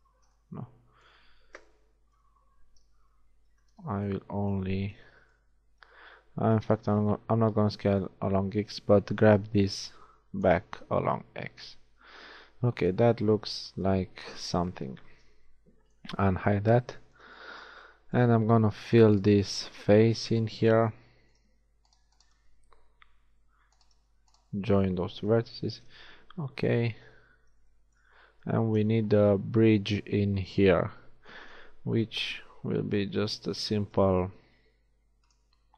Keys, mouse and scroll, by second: 2.3 KP_1, 3.6 z, 3.9 b, 4.9 b, 5.7 b, 7.0 b, 8.6 z, 9.3 click, 10.7 a, 14.3 alt+h, 14.9 a, 19.6 right click, 23.5 f, 25.4 j, 25.8 a, 27.0 KP_1, 27.8 shift+middle click, 28.8 z, 32.3 shift+a, 34.1 shift+a.